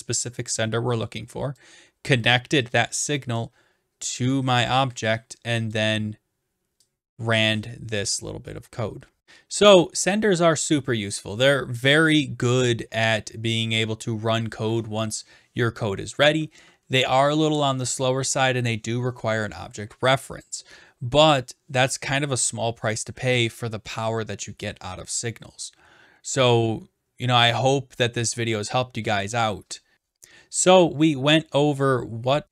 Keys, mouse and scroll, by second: 1.5 click, 3.4 click, 5.7 click, 6.0-6.7 scroll, 8.0 click.